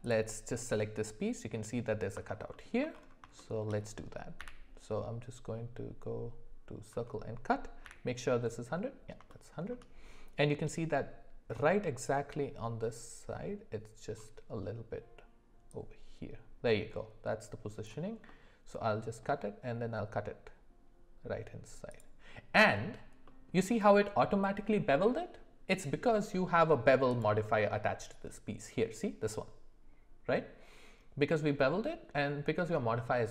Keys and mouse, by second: 0.0 click, 2.5 alt+middle click, 3.4 shift+middle click, 4.4 d, 7.8 d, 9.3 shift+middle click, 16.2-22.1 drag, 18.3-22.1 middle drag, 23.2 middle click, 27.2 click.